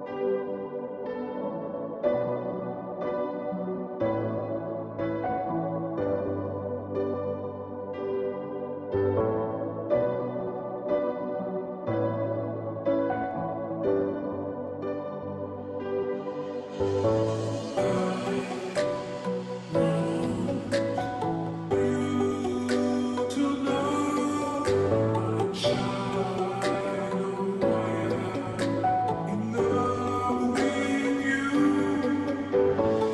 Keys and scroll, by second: 29.4 ], 29.8 ].